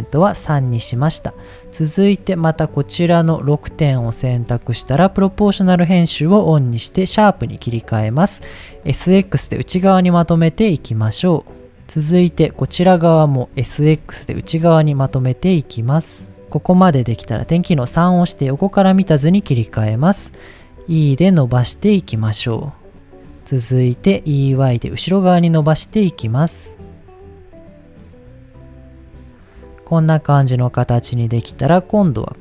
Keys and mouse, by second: 0.9 middle click, 2.0 middle click, 2.6 click, 4.2 shift+middle click, 4.8 click, 5.3-7.8 drag, 8.6 s, 8.8 s, 9.2 x, 12.4 click, 13.5 s, 13.8 x, 17.6 KP_3, 18.8 shift+middle click, 20.8 e, 23.4 click, 24.2 e, 24.5 y, 27.0 click, 27.5-29.6 middle drag, 30.7 middle click, 32.0 middle click.